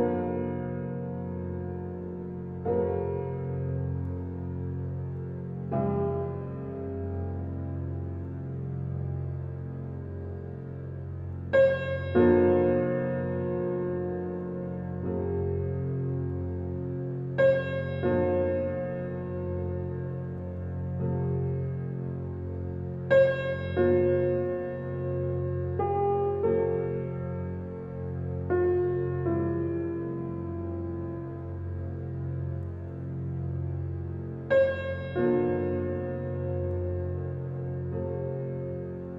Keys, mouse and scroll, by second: 0.2 click, 1.1 Tab, 1.4 shift+middle click, 1.8-2.7 scroll down 2, 2.7 ctrl+r, 5.6 click, 6.5 alt+click, 7.5 click, 8.0 Tab, 8.4-9.3 middle drag, 9.3 scroll up 2, 11.9 click, 12.4 click, 12.9-13.3 scroll down 2, 13.3-13.7 middle drag, 13.7 scroll down 2, 14.2-15.4 shift+middle drag, 15.4-16.5 drag, 16.5 Tab, 18.5 alt+click, 19.4 click, 20.7 alt+click, 22.6-24.5 middle drag, 24.5 scroll up 2, 25.6-27.1 alt+drag, 27.9 alt+middle click, 28.5 shift+middle click, 29.4 alt+z, 30.3 click, 31.5 middle click, 32.1 scroll down 2, 32.4-33.8 middle drag, 33.8 click, 34.8 scroll down 2, 35.2 click, 38.5 click.